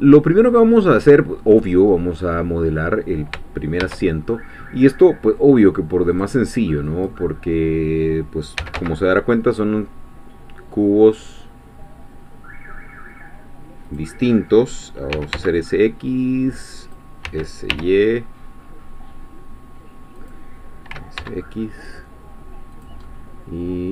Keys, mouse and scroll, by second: 0.0 scroll down 1, 0.9-3.3 middle drag, 3.8 shift+a, 6.9-8.6 drag, 8.6 s, 8.8 z, 13.9-15.1 drag, 15.1 s, 15.3 x, 16.8 click, 17.3 s, 17.7 y, 20.2 click, 20.9 s, 21.2 x, 22.7 click, 23.1-23.9 middle drag.